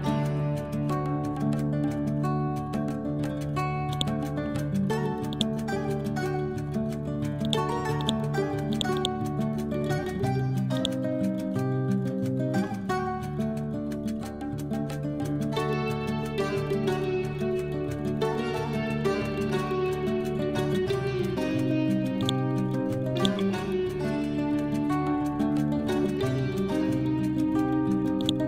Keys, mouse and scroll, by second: 3.8 click, 5.2 right click, 7.3-12.9 drag, 12.6-13.5 typing, 13.7 Tab, 15.3-16.1 typing, 16.9 shift+Tab, 22.1 click, 28.1 click.